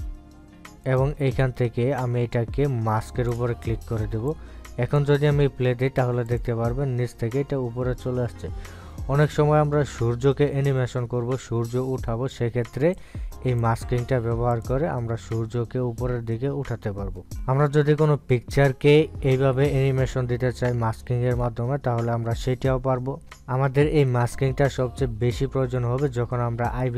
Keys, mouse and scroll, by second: 2.2 right click, 4.6-7.6 drag, 14.3-15.9 drag.